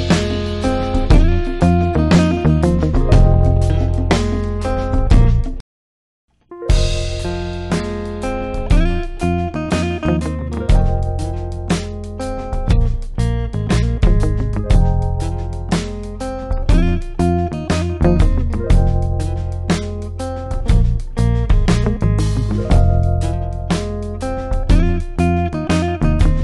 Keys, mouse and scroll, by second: 0.6-1.2 drag, 5.8-6.4 drag, 7.5-8.6 typing, 9.8-11.5 typing, 11.0 click, 13.2-13.9 typing, 16.8-17.5 typing, 17.4 click.